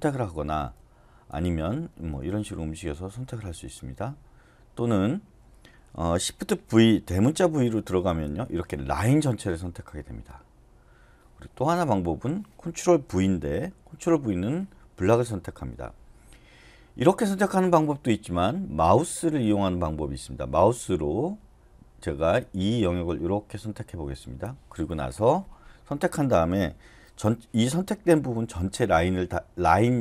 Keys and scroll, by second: 0.1 Up, 0.1 Down, 0.3 Down, 0.5 Down, 0.7 Down, 1.3 Right, 1.6 Right, 7.7 shift+v, 13.6 ctrl+v.